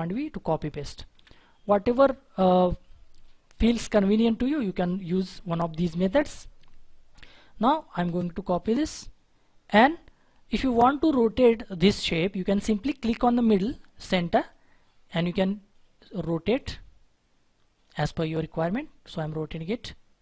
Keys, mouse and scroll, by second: 1.1 click, 1.6-2.5 scroll down 1, 2.5 scroll down 1, 2.5-5.5 scroll up 1, 7.6-8.3 scroll down 1, 8.7 right click, 9.1-10.6 scroll up 1, 10.6-11.0 scroll down 1, 11.1 scroll up 1.